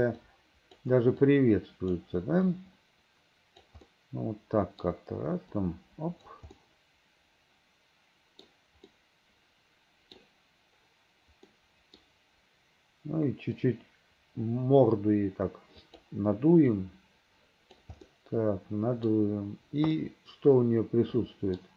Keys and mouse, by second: 0.3 right click, 1.4 right click, 2.6-3.7 right drag, 4.0-5.0 drag, 5.7 right click, 6.7-8.6 middle drag, 9.0-10.3 middle drag, 11.6 middle click, 13.7-16.1 right drag, 16.8-17.9 right drag, 18.2-19.2 middle drag, 20.1-21.7 middle drag.